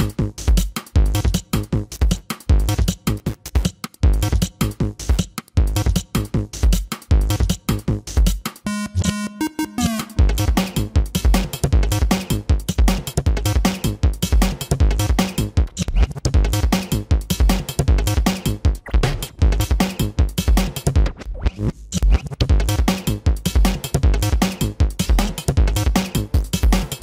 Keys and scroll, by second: 3.7 ctrl+-, 4.5 ctrl+-, 5.6 ctrl+-, 8.9 ctrl+-, 9.2 space, 13.1 space, 14.3 space, 15.4 space, 23.5 ], 25.8 space.